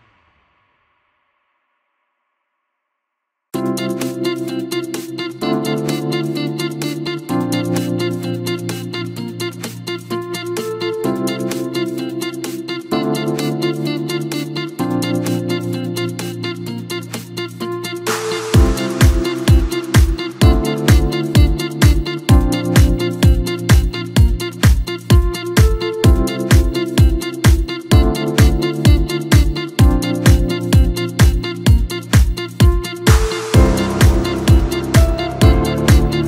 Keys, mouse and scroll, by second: 3.0 ctrl+r, 6.5-8.5 drag, 9.4-13.1 drag, 14.6 click, 15.3 click, 18.4 i, 19.8 i, 21.8-23.6 drag, 23.6-26.6 middle drag, 28.6-30.7 drag, 31.6 click, 34.0 click.